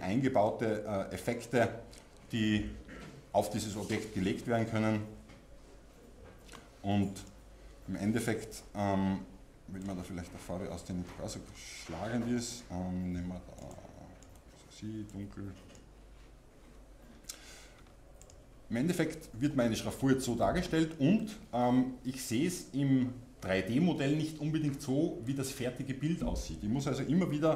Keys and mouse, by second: 9.8-12.5 drag, 18.2-27.5 drag.